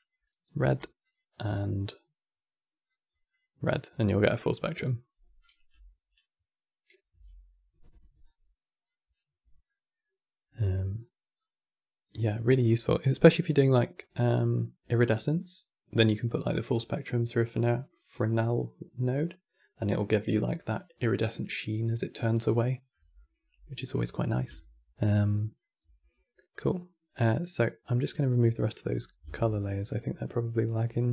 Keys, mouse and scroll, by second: 1.1 click, 3.0 click, 5.1 click, 6.9 x, 7.9 click, 9.4-10.7 middle drag, 10.7-13.8 drag, 24.3-27.3 shift+middle drag, 28.4 click.